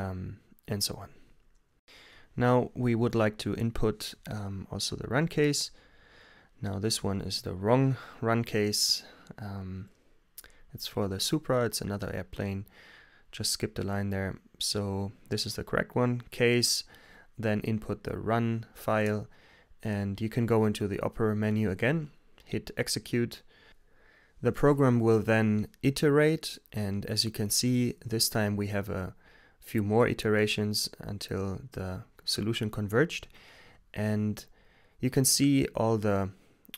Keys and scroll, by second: 5.0-6.0 typing, 15.0-16.0 typing, 17.7-18.8 typing, 20.6 Return, 23.0 x, 24.6 Return, 30.4 t, 30.8 Return.